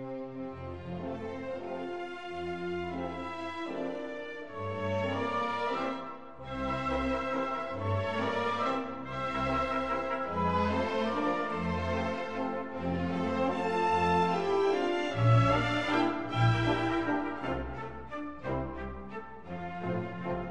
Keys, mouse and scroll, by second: 2.3-4.0 middle drag, 9.0 a, 9.4 a, 10.6 e, 14.8 Tab, 15.7-17.5 drag, 18.6-20.3 drag.